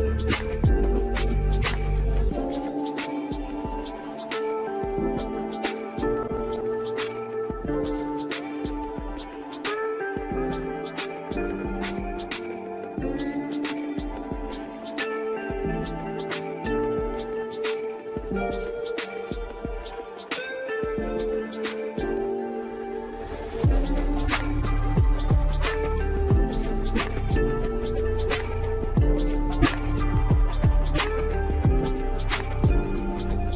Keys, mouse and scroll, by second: 0.6 KP_0, 1.1 click, 2.0 shift+a, 3.4-4.3 middle drag, 4.3 g, 5.6 g, 7.4 middle click, 7.8 KP_0, 8.7-9.1 scroll up 1, 9.2 n, 10.5 drag, 10.9 click, 11.3 scroll down 3, 11.6-14.0 middle drag, 14.0-14.4 scroll down 1, 14.6-15.7 shift+middle drag, 15.7 click, 15.9 Tab, 16.3 click, 16.9 click, 17.5 click, 18.0 e, 19.6 Tab, 20.3 a, 20.7 click, 21.0 click, 21.7 click, 22.4 click, 22.9 drag, 23.8 click, 24.6 click, 24.9 s, 26.0 ctrl+a, 27.1 Tab, 27.9 click, 28.7 ctrl+b, 31.8-33.5 right drag.